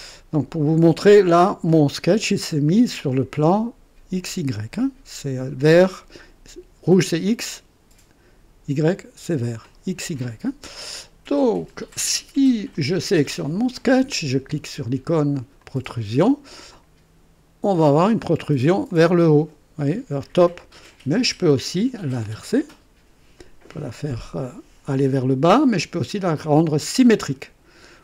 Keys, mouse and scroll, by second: 2.6 click, 12.7 click, 15.6 click, 16.7-18.0 drag, 18.9-21.3 drag, 22.4 click, 25.1 click, 26.3 click.